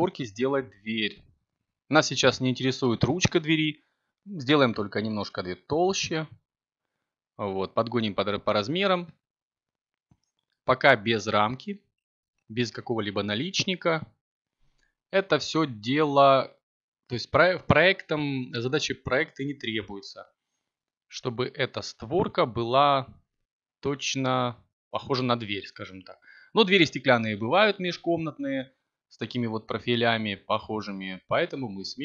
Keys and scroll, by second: 1.7 Tab, 5.4 ctrl+t, 7.1 z, 9.7 b.